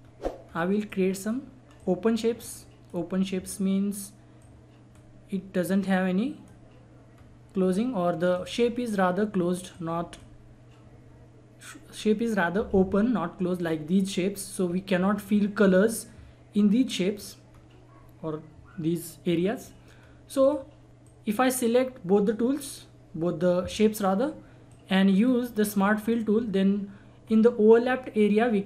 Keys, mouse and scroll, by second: 0.0-0.4 scroll down 1, 0.4-0.9 scroll up 1, 0.9-7.1 drag, 7.1-8.0 scroll up 1, 8.2 click, 8.6 scroll down 1, 9.7-13.5 drag, 14.3-14.6 scroll down 1, 14.6-15.2 scroll up 1, 17.1-17.4 scroll up 1, 19.6 scroll down 1, 20.0 scroll up 1, 20.4-24.7 drag, 24.7-26.0 drag, 27.2-27.6 scroll up 1, 27.8-28.6 scroll down 1.